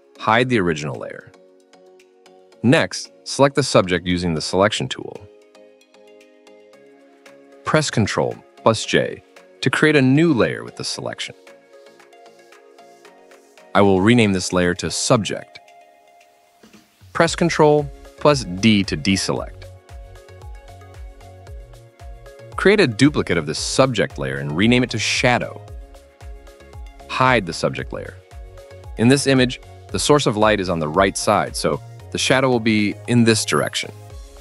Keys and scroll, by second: 0.5-1.4 typing, 3.3 ], 3.8 ], 8.7 ctrl+j, 14.0-15.6 typing, 17.7 ctrl+d, 22.4 ctrl+j, 24.2-25.5 typing.